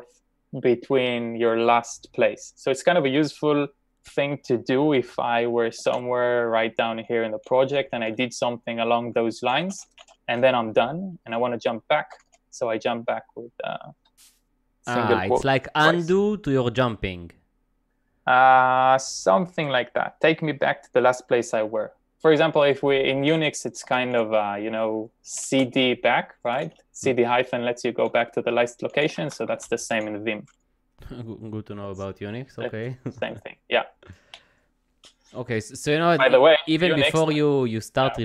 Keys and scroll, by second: 5.9 shift+g, 7.7-10.1 typing, 12.1 ', 23.2 k, 23.9 a, 25.2-27.2 typing, 28.7-29.6 typing, 33.2 j, 34.2 k, 36.7 c.